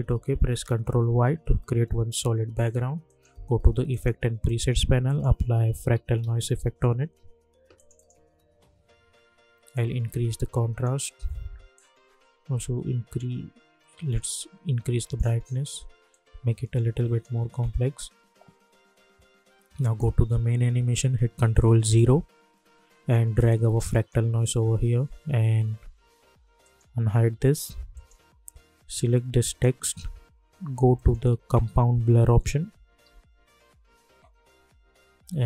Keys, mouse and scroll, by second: 0.8 ctrl+y, 1.6 Return, 3.0 click, 5.4-7.0 typing, 7.7-19.5 drag, 19.8 click, 21.8 ctrl+0, 23.4-26.3 drag, 26.6 click, 31.2 ctrl+a, 31.2-33.5 typing.